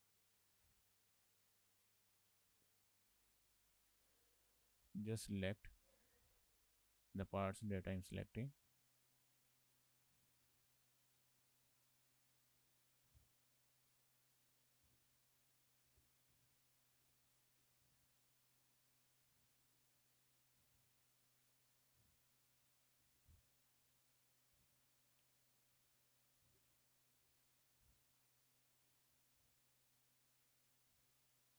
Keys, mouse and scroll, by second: 2.8 shift+middle click, 3.8 click, 5.1 shift+click, 6.4 shift+click, 9.2 shift+click, 10.0 shift+click, 10.2 shift+click, 10.5 ctrl+z, 10.6 ctrl+z, 10.9 alt+shift+click, 11.2 alt+shift+click, 11.7 alt+shift+click, 12.1 alt+shift+click, 12.4 alt+shift+click, 12.6 scroll down 2, 12.7 shift+middle click, 13.8 alt+shift+click, 14.1 alt+shift+click, 15.0 ctrl+z, 15.6 alt+shift+click, 16.0 ctrl+z, 16.1 scroll up 2, 16.2 shift+middle click, 16.7 alt+shift+click, 17.1 ctrl+z, 17.3 alt+shift+click, 18.5 alt+shift+click, 18.8 alt+shift+click, 19.7 scroll down 2, 19.8 shift+middle click, 20.1 scroll up 2, 20.3 shift+middle click, 21.1 alt+shift+click, 21.4 alt+shift+click, 21.8 alt+shift+click, 22.7 alt+shift+click, 23.1 ctrl+z, 23.5 alt+shift+click, 24.7 scroll down 3, 25.2 shift+middle click, 25.6-26.2 scroll up 3, 26.2 alt+shift+click, 26.6 ctrl+z, 26.9 alt+shift+click, 27.1 alt+shift+click, 27.3 ctrl+z, 28.0 alt+shift+click, 28.3 alt+shift+click, 29.0 shift+middle click, 29.6 alt+shift+click, 29.8 alt+shift+click, 31.1 shift+click, 31.2 shift+click.